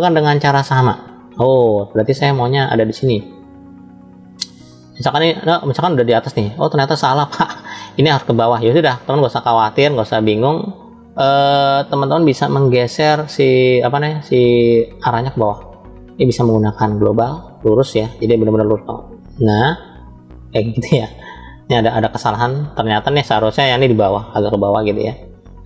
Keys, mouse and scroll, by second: 5.3-7.9 middle drag, 9.8-13.2 middle drag, 16.1-17.8 drag, 18.3 click, 18.5-23.8 drag.